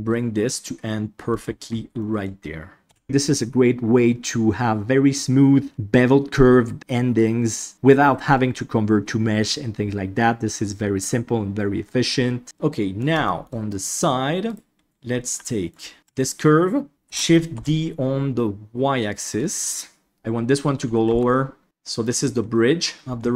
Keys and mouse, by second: 0.2-1.3 middle drag, 2.1 middle click, 2.8 KP_Divide, 12.4 middle click, 13.3 shift+middle click, 13.6 middle click, 14.4 right click, 15.4 middle click, 17.0 shift+d, 19.4 middle click, 20.1 ctrl+KP_1, 20.1 KP_3, 21.0 g, 21.6 middle click.